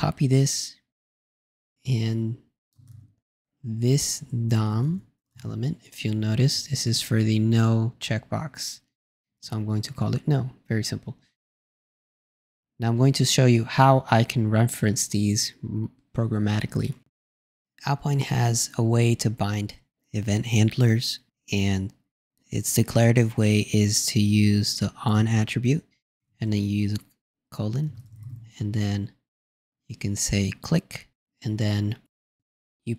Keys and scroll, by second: 1.6 shift+super+c, 2.8 super+space, 2.9 super+v, 3.8 super+Left, 26.1 shift+n.